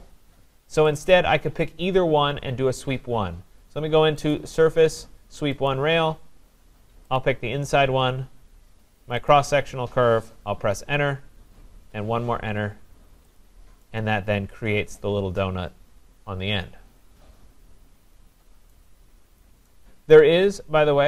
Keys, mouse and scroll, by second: 1.0 click, 4.3 click, 5.7 click, 7.2 click, 9.3 click, 10.6 Return, 11.8 Return, 13.4 click, 16.4-18.5 drag, 18.7 right click, 20.1 right click.